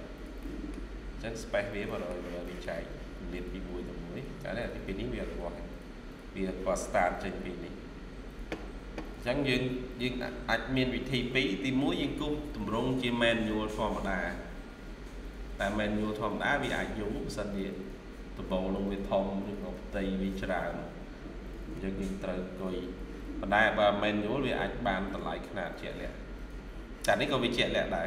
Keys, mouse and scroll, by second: 0.3 middle click, 1.8 middle click, 2.1 scroll down 1, 2.4 middle click, 3.9-4.4 scroll down 1, 5.4-6.4 scroll up 1, 6.6-7.2 scroll up 1, 7.3-8.3 scroll down 1.